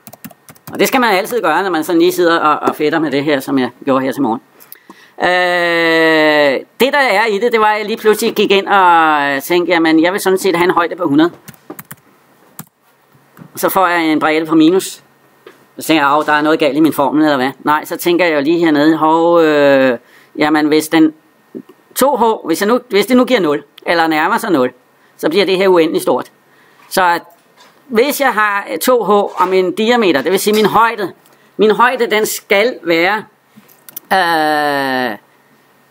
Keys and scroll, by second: 1.1 Return, 12.4 Return.